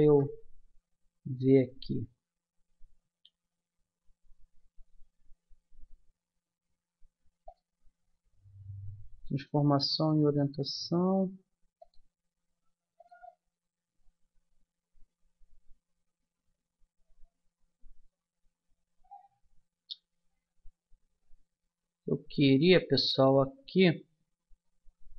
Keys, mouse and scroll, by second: 0.0 n, 3.2-7.4 middle drag, 7.4-9.2 drag, 13.0-14.8 drag.